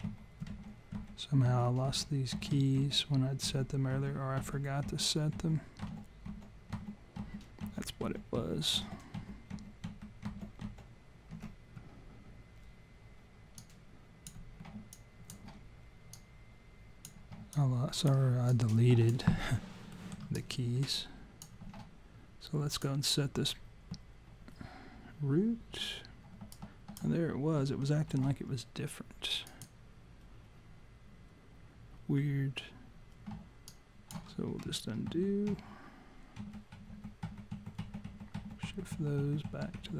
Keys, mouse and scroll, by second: 0.1 ctrl+z, 0.5 ctrl+z, 1.0 ctrl+z, 1.5 ctrl+z, 1.9 ctrl+z, 2.4 ctrl+z, 2.8 ctrl+z, 3.5 ctrl+z, 4.0 ctrl+z, 4.4 ctrl+z, 4.9 ctrl+z, 5.4 ctrl+z, 5.8 ctrl+z, 6.3 ctrl+z, 6.8 ctrl+z, 7.2 ctrl+z, 7.7 ctrl+z, 8.1 ctrl+z, 8.4 ctrl+z, 8.8 ctrl+z, 9.2 ctrl+z, 9.6 ctrl+z, 9.9 ctrl+z, 10.3 ctrl+z, 10.7 ctrl+z, 13.6 click, 14.9 alt+click, 16.1 click, 17.5 alt+click, 18.5 click, 19.9 alt+middle click, 20.3 alt+click, 22.7 click, 26.5 alt+click, 29.5 click, 33.7 alt+click, 35.1 ctrl+z, 35.5 ctrl+z, 36.4 ctrl+z, 36.8 ctrl+z, 36.9 ctrl+z, 37.3 ctrl+z, 37.6 ctrl+z, 37.8 ctrl+z, 38.1 ctrl+z, 38.3 ctrl+z, 38.6 ctrl+z, 38.9 ctrl+z, 39.2 ctrl+z, 39.5 ctrl+z, 39.7 ctrl+z.